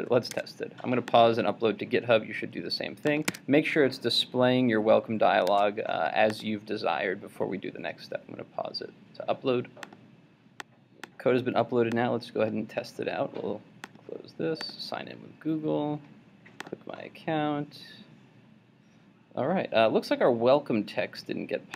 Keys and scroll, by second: 0.5 super+Tab, 3.4 super+Tab.